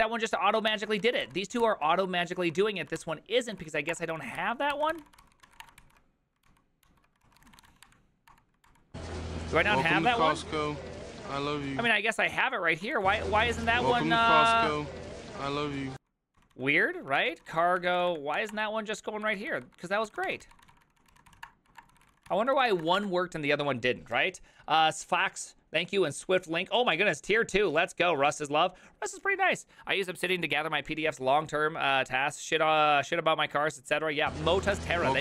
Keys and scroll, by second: 0.7-6.0 typing, 3.0 ctrl+c, 6.5 ctrl+t, 6.9 ctrl+h, 7.2-15.2 typing, 8.3 Return, 8.7 ctrl+d, 15.6 ctrl+^, 16.4 ctrl+o, 16.5 ctrl+o, 17.1-23.2 typing, 18.1 Up, 18.4 Down, 18.5 Return.